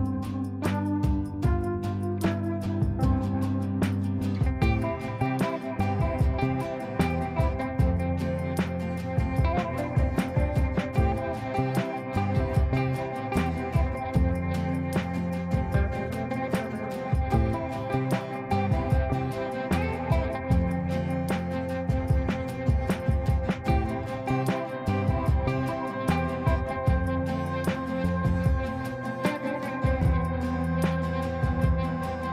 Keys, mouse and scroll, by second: 5.4 ctrl+right click, 6.6 click, 7.3 ctrl+a, 8.1-9.3 typing, 10.5-13.8 typing, 14.1 ctrl+space, 15.4 click, 18.9 click, 21.5 shift+click, 22.8 c, 23.2 click, 24.6 click, 25.2 click, 26.3 shift+click, 27.1 c, 28.1 click, 29.0-29.6 shift+drag, 32.2 space.